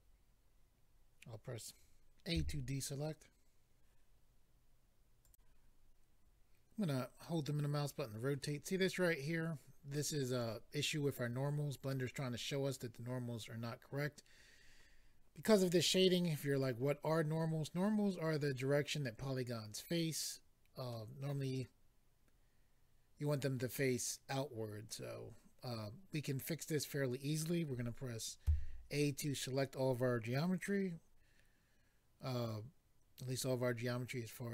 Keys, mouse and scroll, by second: 2.4 a, 5.2 click, 5.3 click, 7.2 middle click, 20.9 middle click, 28.4 a.